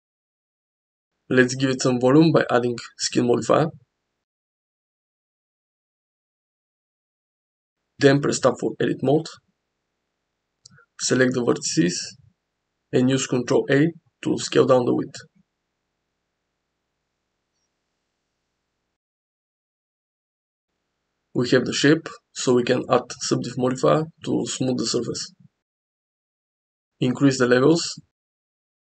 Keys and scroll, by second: 1.4 Tab, 8.1 Tab, 8.9 a, 9.5 ctrl+a, 11.9 ctrl+a, 14.2 ctrl+a, 15.7 ctrl+a, 18.7 ctrl+a, 20.5 ctrl+a, 22.2 Tab.